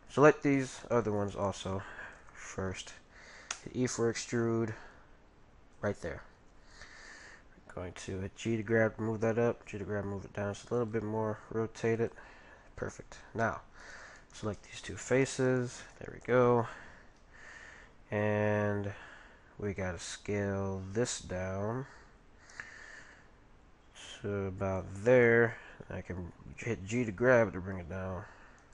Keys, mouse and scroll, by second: 0.4-3.1 right drag, 3.5 e, 6.4 g, 9.5 g, 11.3 r, 12.8-14.5 middle drag, 13.8-17.4 right drag, 21.0 s, 25.5 g.